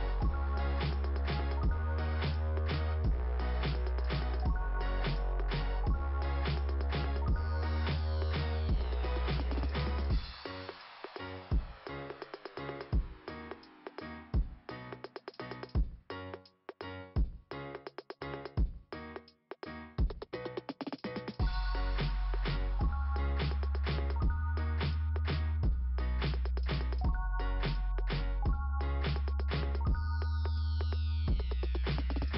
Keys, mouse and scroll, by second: 0.0 click, 1.6 click, 6.5 click, 8.0 click, 9.3 click, 9.4 click, 11.1 click, 15.0 click, 20.4 scroll up 2, 23.7 scroll down 2, 26.3 click.